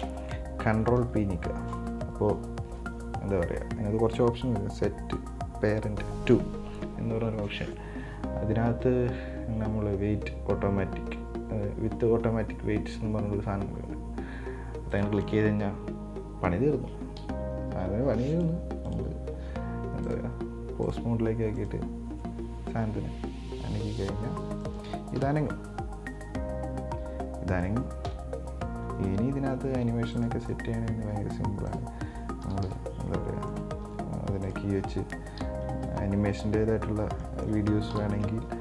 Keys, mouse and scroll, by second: 1.3 ctrl+p, 17.5 KP_1, 18.6 right click, 19.1 right click, 20.3-21.8 drag, 21.8 right drag, 22.9 r, 25.4 KP_7, 26.4 r, 28.3 KP_1, 29.1 r, 30.8 right click, 31.1 r, 32.6 KP_1, 32.8 KP_3, 33.7 right click, 34.1 r, 35.1 scroll down 4, 36.0 KP_3, 36.2 KP_9, 37.2 scroll up 2, 37.5 middle click, 38.2 KP_7.